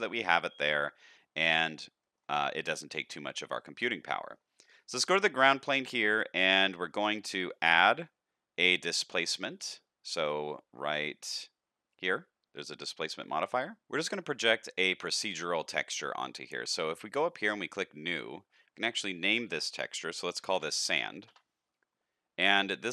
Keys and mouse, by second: 0.8 shift+middle drag, 2.0 shift+middle click, 2.9 shift+middle drag, 3.5 middle click, 4.5-5.6 middle drag, 5.8 shift+middle click, 7.6-13.2 drag, 17.6 click, 19.0-22.0 drag.